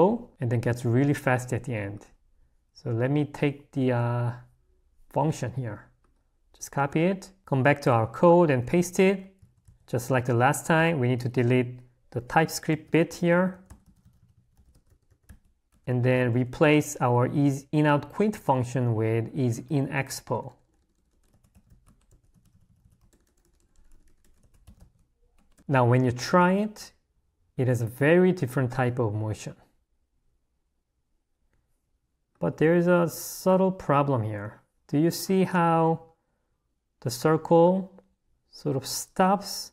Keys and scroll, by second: 7.4 0, 9.9 w, 12.4-16.6 typing, 19.6 a, 22.3 l, 22.9 a.